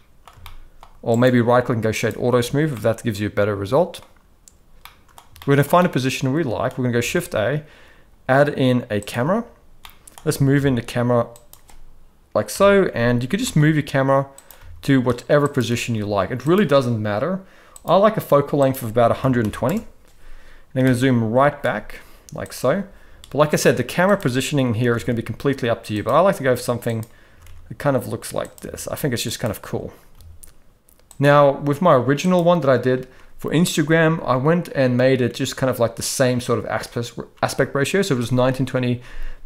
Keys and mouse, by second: 0.4-0.8 shift+middle drag, 1.2-2.2 right drag, 2.7-4.0 middle drag, 4.8 middle click, 5.4 shift+middle click, 5.8-6.6 middle drag, 6.9 shift+a, 9.8-10.1 middle drag, 10.3 g, 12.5 KP_0, 13.3 g, 14.6 g, 16.1 g, 17.7 click, 18.6-19.7 drag, 20.8 g, 23.6-24.2 drag, 24.8 r, 26.3 r, 27.3 r, 28.6 g, 30.1 g, 32.2 click.